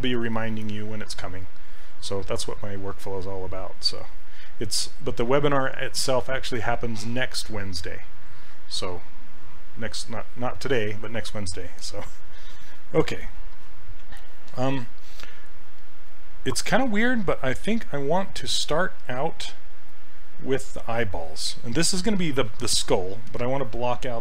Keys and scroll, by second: 2.8 s, 18.6 s.